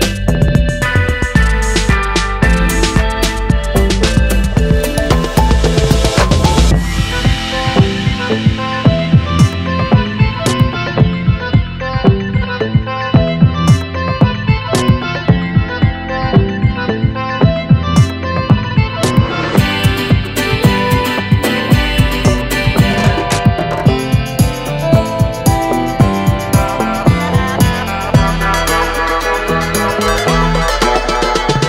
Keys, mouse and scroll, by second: 1.9 shift+click, 4.3 shift+middle click, 14.1-14.4 shift+drag, 16.8 click, 18.1-20.9 drag, 22.3 click, 23.2-23.7 drag, 24.2 click, 24.7 click, 25.1-26.6 drag, 28.1-28.4 shift+drag, 29.0 shift+click.